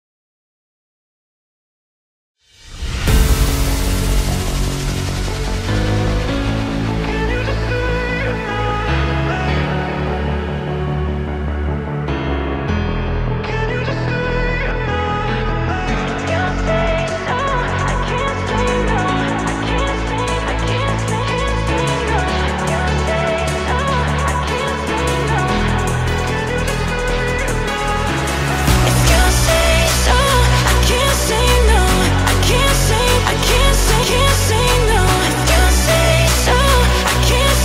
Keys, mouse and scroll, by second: 0.2 r, 2.7 middle click, 3.2 click, 3.6 middle click, 4.2 click, 4.5 s, 7.0 click, 7.5-8.1 middle drag, 8.1 click, 8.4-10.7 middle drag, 10.7 r, 12.1-13.7 middle drag, 13.7 click, 14.8 shift+d, 15.9-17.3 middle drag, 17.3 r, 18.7-19.7 middle drag, 19.7 r, 20.9 r, 22.9 g, 24.1 click, 24.4-25.4 middle drag, 25.4-25.7 scroll down 1, 25.7-26.2 middle drag, 26.2 click, 26.5-27.2 middle drag, 27.2 click, 27.5-28.8 middle drag, 28.8 r, 30.3-30.8 middle drag, 30.8 shift+d, 32.6 r, 34.0-37.6 middle drag, 34.4 g.